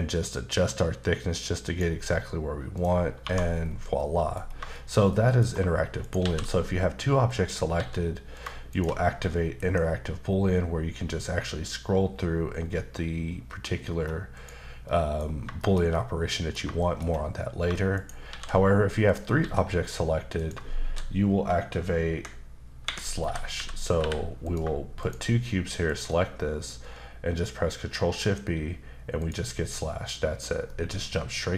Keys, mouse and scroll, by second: 2.7 click, 3.2 1, 3.6-3.9 scroll down 2, 4.0 middle click, 4.7 shift+middle click, 6.0 shift+right click, 6.2 shift+a, 7.3 click, 7.7 s, 8.3 click, 8.7 shift+click, 9.6 shift+b, 10.3-12.1 scroll down 5, 12.1-14.3 scroll up 5, 14.3 click, 14.8 middle click, 15.2 scroll up 1, 15.6 shift+middle click, 15.8 scroll up 1, 15.9 middle click, 16.8 shift+middle click, 17.9 shift+right click, 18.3 shift+a, 19.1 click, 19.4 s, 20.4 click, 20.9 shift+d, 22.2 Escape, 22.8 Escape, 23.2-24.0 typing, 24.5 click, 25.0 shift+click, 25.9 shift+double click, 28.2 shift+b, 30.7 middle click.